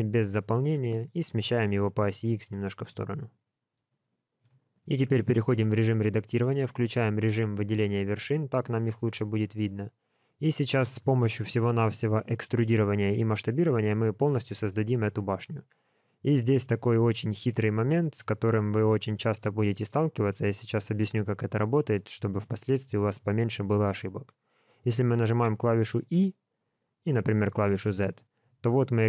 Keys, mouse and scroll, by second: 3.1 middle click, 3.7-4.3 scroll up 1, 4.4 KP_1, 4.9 Tab, 7.1 click, 8.1-8.5 scroll up 2, 8.5 shift+middle click, 10.4-10.7 scroll down 1, 11.0 shift+middle click, 16.0-16.3 scroll up 1, 16.5 shift+middle click.